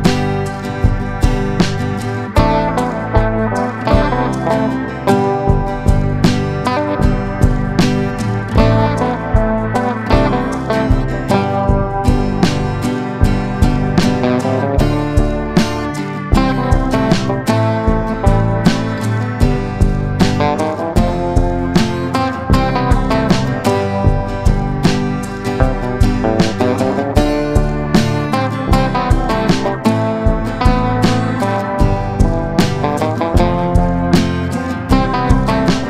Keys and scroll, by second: 9.9 Escape, 13.4 ctrl+z, 15.9 Escape, 17.9 F2, 22.1 F3, 22.4 F2, 23.3 Escape, 30.4 F3, 30.8 F2, 31.6 Escape.